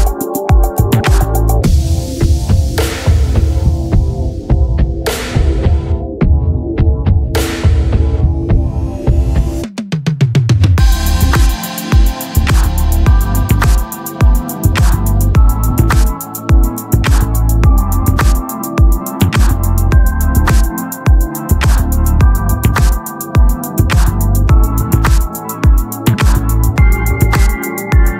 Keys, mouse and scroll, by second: 0.3 Tab, 0.9 ctrl+r, 1.7 click, 2.3 x, 4.0 ctrl+z, 4.5 x, 5.8-7.3 drag, 7.8-9.8 drag, 9.8 z, 10.0 Tab, 11.8 x, 12.7 shift+a, 14.5-16.7 drag, 17.1 s, 17.9 KP_3, 19.1 r, 20.9 Tab, 21.8 click, 22.0 z, 22.2 c, 25.8 click, 26.6 ctrl+r, 27.0 right click, 27.9 x.